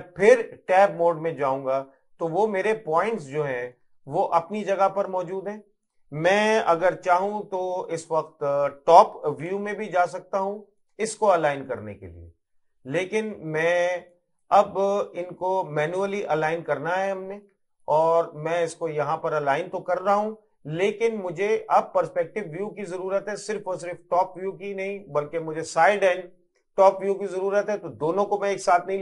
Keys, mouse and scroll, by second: 0.5 Tab, 1.1 middle click, 2.1 scroll up 1, 3.2 middle click, 4.1 middle click, 9.5 KP_7, 10.9 click, 17.2 middle click, 17.9 click, 20.3 middle click, 22.4 middle click, 23.2 middle click, 24.0 middle click.